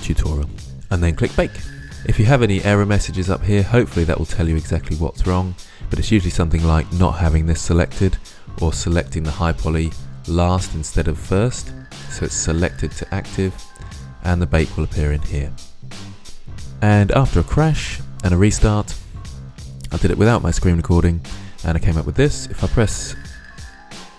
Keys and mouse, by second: 0.7-1.8 drag, 23.4 click.